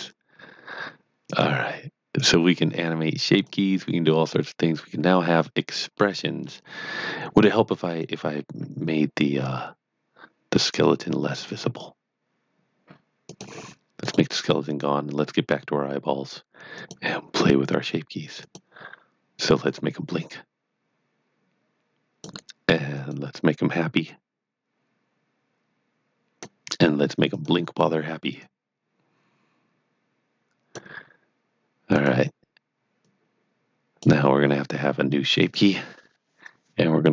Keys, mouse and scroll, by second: 5.8 middle click, 6.8 scroll down 1, 7.9 click, 11.3 click.